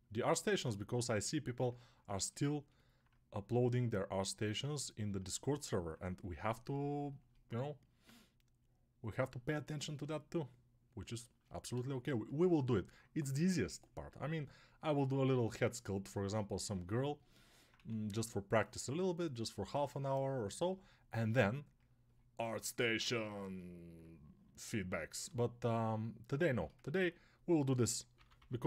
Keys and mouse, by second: 1.8-2.9 alt+shift+right drag, 2.9-28.6 drag, 17.6 1, 28.0 p, 28.2 [.